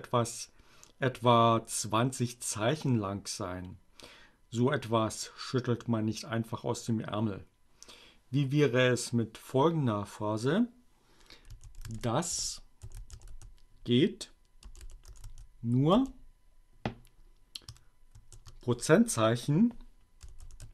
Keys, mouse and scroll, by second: 9.3-10.4 typing, 12.3-15.6 typing, 17.6 shift+5, 19.9-20.7 typing.